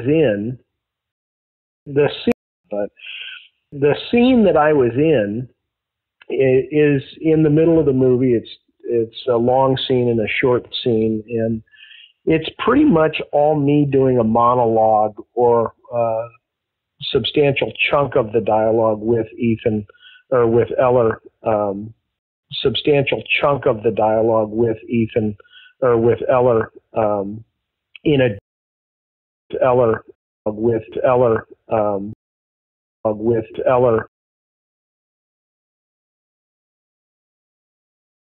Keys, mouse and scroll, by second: 0.2 click, 1.0 space, 1.5 ctrl+shift+Delete, 1.8 space, 2.2 space, 2.4 click, 2.5 space, 4.6 ctrl+s, 9.5 click, 10.8 click, 11.7 click, 12.3-13.4 drag, 13.6 click, 22.1 space, 22.2 click, 22.3 space, 25.6-28.3 drag, 28.3 space, 29.0 ctrl+shift+Delete, 29.4 space, 30.0 space, 30.3 click, 30.3 space, 32.0 space, 32.9 click, 32.9 space, 34.0 space, 35.9-37.6 drag, 37.9 s.